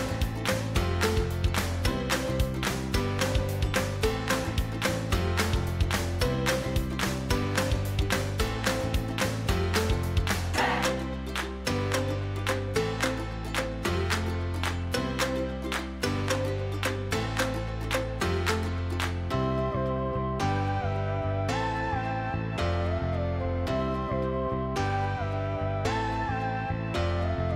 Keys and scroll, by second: 9.7 ctrl+t.